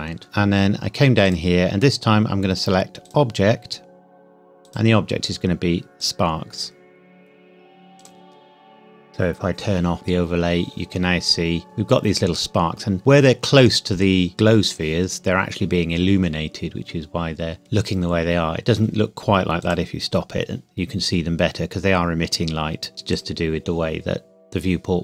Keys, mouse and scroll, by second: 0.2-0.7 scroll down 1, 1.2 click, 3.8 scroll down 1, 4.6 click, 11.6 scroll up 1, 19.6 click, 23.1 click, 24.6-25.0 scroll down 1.